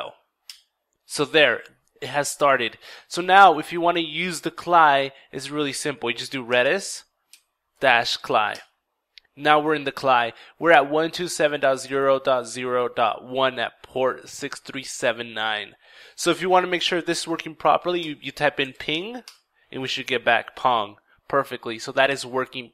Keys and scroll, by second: 5.6 ctrl+r, 5.6 ctrl+e, 5.6 typing, 6.0 ctrl+d, 6.0 ctrl+i, 6.1 ctrl+s, 6.8 ctrl+-, 7.2 ctrl+c, 7.5 ctrl+l, 7.6 ctrl+i, 8.0 ctrl+Return, 17.7 ctrl+p, 17.7 typing, 18.1 ctrl+i, 18.2 ctrl+n, 18.4 ctrl+g, 18.7 ctrl+Return.